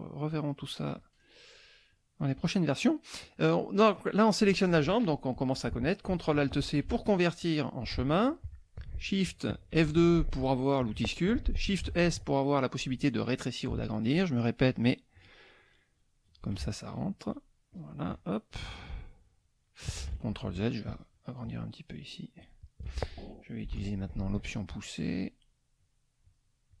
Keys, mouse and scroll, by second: 0.9 click, 1.2 middle click, 1.9 click, 6.6 ctrl+alt+c, 9.7 shift+F2, 11.8 shift+s, 14.0 shift+click, 14.7 shift+click, 15.2 shift+click, 15.6 shift+click, 16.0 shift+click, 16.9 shift+click, 17.2 shift+click, 17.7 shift+click, 19.2 shift+click, 20.1 ctrl+shift+z, 20.9 shift+click, 21.5 shift+click, 22.0 shift+click, 22.4 shift+click, 23.7 shift+p, 25.0 click, 25.8 click, 26.2 click, 26.7 click.